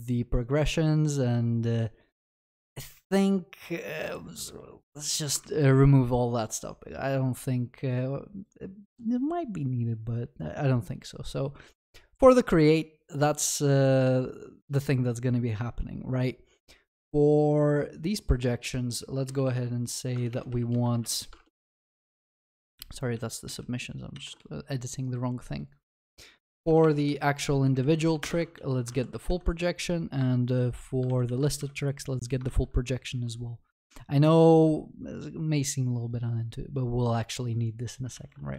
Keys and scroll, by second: 5.5 ctrl+s, 20.2 ctrl+BackSpace, 22.8 ctrl+z, 23.5 ctrl+z, 28.3 Return, 28.9 ctrl+w, 29.3 ctrl+s, 38.2 ctrl+s.